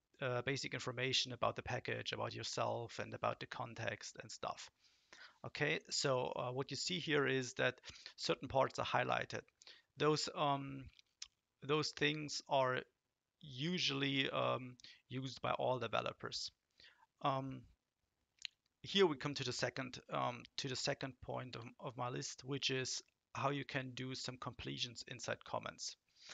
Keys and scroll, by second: 21.5 Return.